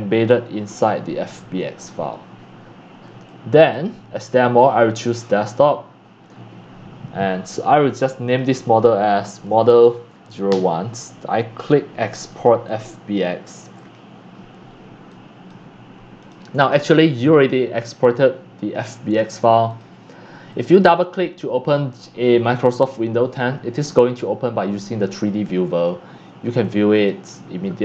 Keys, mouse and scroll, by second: 3.7-6.9 drag, 7.2-9.3 drag, 9.1-11.0 typing, 12.4-16.3 drag, 16.6 click, 19.7 click, 20.5 click, 20.6 click, 23.4 click, 25.4 click, 26.0-27.2 scroll up 4, 27.2 click, 27.3-27.8 middle drag.